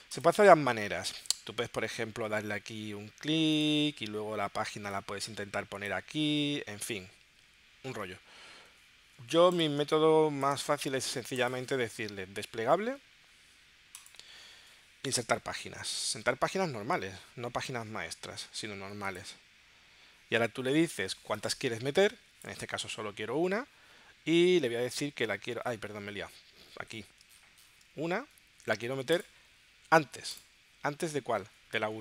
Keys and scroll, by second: 9.8 space.